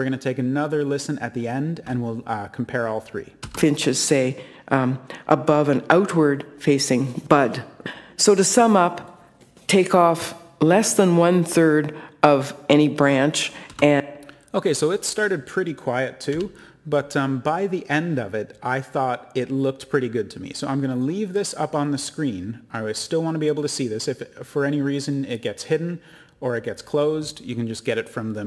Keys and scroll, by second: 16.2 Return.